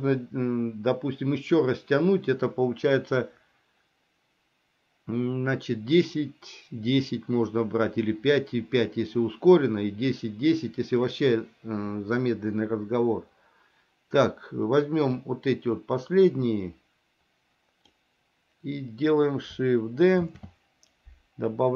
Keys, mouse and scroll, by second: 15.3-18.0 drag, 20.4 shift+d.